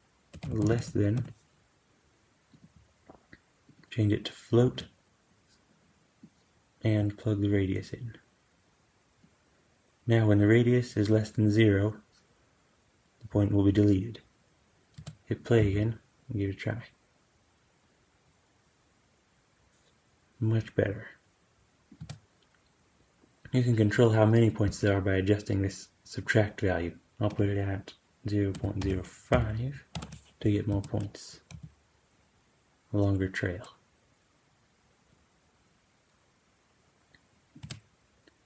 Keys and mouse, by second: 0.6 s, 3.5-21.9 drag, 14.8 space, 15.5 g, 21.9 space, 27.1-37.6 drag, 30.6 space, 31.4 g, 37.5 space.